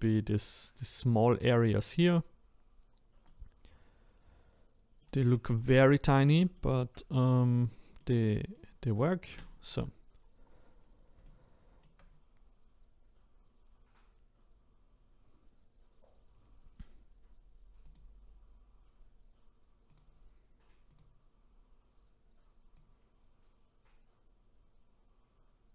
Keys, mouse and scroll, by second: 2.8-3.2 scroll down 1, 3.2-5.9 middle drag, 5.9-7.6 scroll up 4, 7.6 click, 8.0 middle click, 8.8-9.3 scroll down 1, 9.3 a, 17.9 click, 21.0 click.